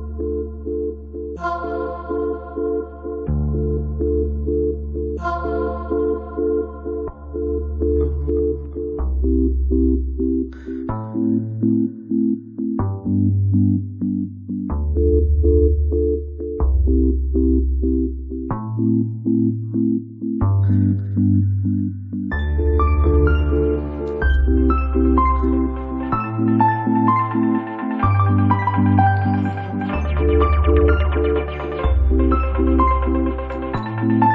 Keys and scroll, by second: 13.8 space.